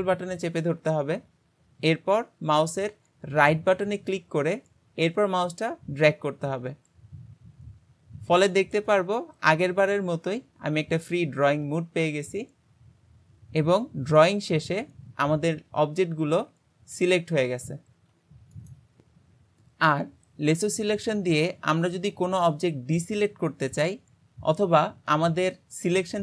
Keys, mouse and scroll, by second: 4.1 ctrl+right click.